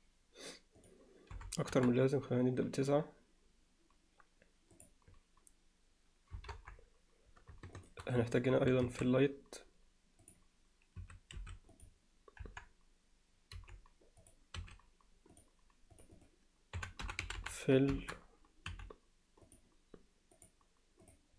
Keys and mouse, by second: 0.8 click, 6.3 KP_0, 6.6 KP_7, 8.9 shift+a, 11.0 s, 12.4 KP_1, 13.6 g, 14.6 r, 16.0 click, 16.2-18.2 drag, 17.4 l, 18.7 m, 20.4 click, 21.1 click.